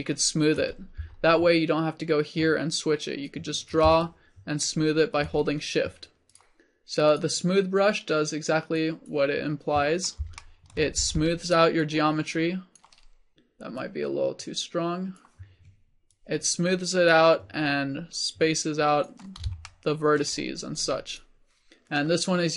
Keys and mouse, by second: 6.4-8.1 drag, 8.8-10.1 drag, 11.0 f, 11.6-18.2 drag.